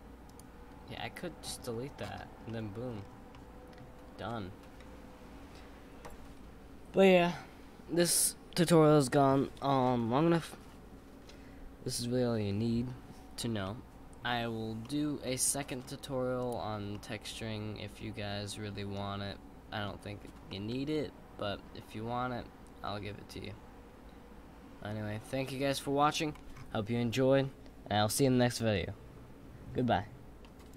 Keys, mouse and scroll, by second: 0.3 click, 0.9-1.6 middle drag, 1.6-2.5 scroll up 4, 2.5-2.9 middle drag, 2.9-3.3 scroll up 4, 3.3-6.3 middle drag, 13.6-14.3 middle drag, 14.3-14.8 scroll up 4, 14.8 middle click, 15.5-16.4 scroll down 4, 16.4 click, 16.9-20.0 middle drag, 20.2 scroll up 1, 20.5-23.5 middle drag.